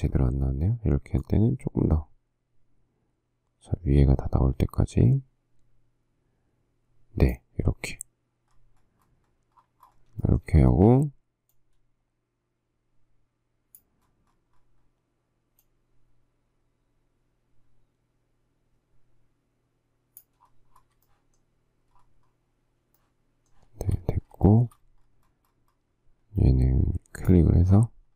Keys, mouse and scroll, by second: 10.4 shift+middle click, 10.7 shift+scroll, 21.3 shift+middle click, 22.2 shift+scroll, 23.2 shift+middle click, 24.0 shift+scroll, 24.7 shift+middle click.